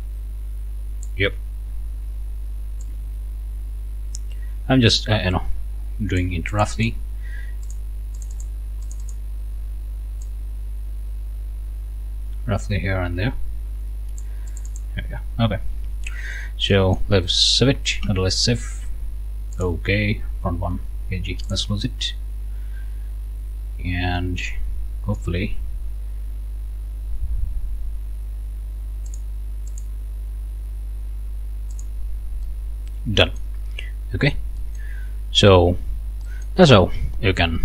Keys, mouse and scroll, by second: 2.8-6.4 ctrl+shift+drag, 6.5 ctrl+shift+click, 7.6 click, 8.2 click, 8.8 click, 10.2-14.4 drag, 14.5 click, 15.3 ctrl+scroll down 1, 15.9 ctrl+scroll down 1, 16.3 scroll up 2, 16.7 click, 18.0 ctrl+s, 19.6 click, 21.5 click, 23.3-23.6 scroll down 2, 23.7 scroll up 1, 24.2 right click, 29.1 click, 29.7 click, 31.8 click, 32.5-33.6 right drag, 33.6-34.2 scroll up 1, 34.6 right click, 35.8 scroll down 2, 36.3 middle click.